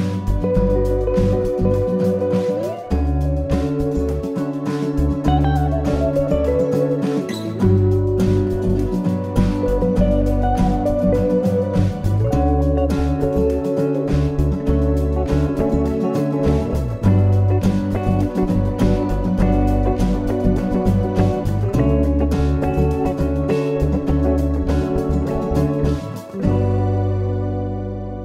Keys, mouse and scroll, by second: 1.9-2.4 scroll up 1, 2.4-3.1 scroll up 2, 3.1-5.0 scroll down 5, 7.3-7.8 scroll up 2, 7.8-8.5 scroll up 3, 8.5 middle click, 11.3 click, 13.2 click, 13.8 click, 17.1 i, 27.5 i.